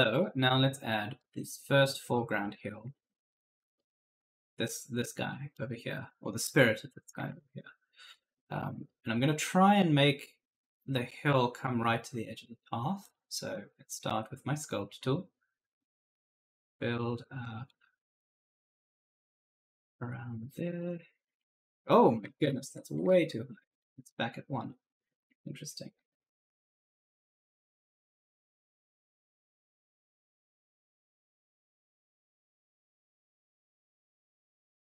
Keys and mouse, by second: 0.9-1.9 typing, 1.0 right click, 2.8 alt+Tab, 3.4 right click, 5.4 right click, 7.1 alt+Tab, 7.7-8.9 typing, 7.8 right click, 12.9 click, 15.4 click, 20.4 click, 22.1 ctrl+z, 23.5 click, 25.9 Return, 27.8 click, 30.5-32.6 typing, 30.8 right click, 32.0 right click.